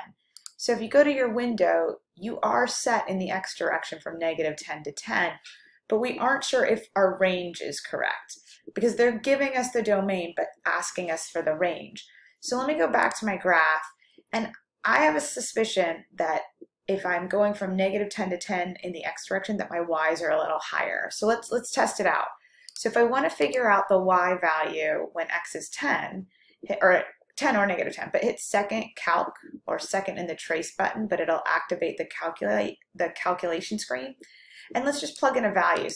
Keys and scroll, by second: 35.1 1.